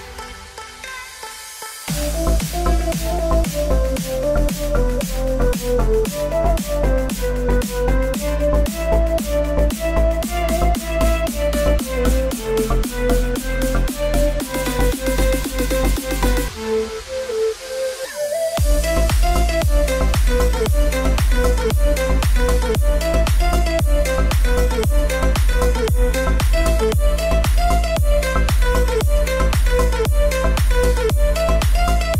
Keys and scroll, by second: 1.2 r, 23.7 Return.